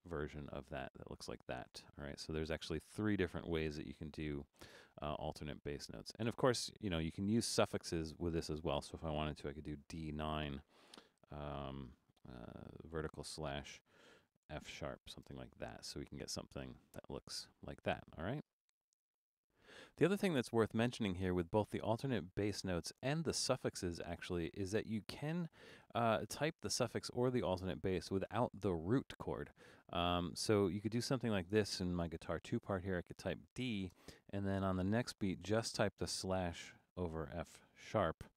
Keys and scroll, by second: 9.7 shift+d, 10.1 9, 11.8 shift+i, 13.5-15.3 typing, 33.0-33.9 typing, 36.0-38.3 typing.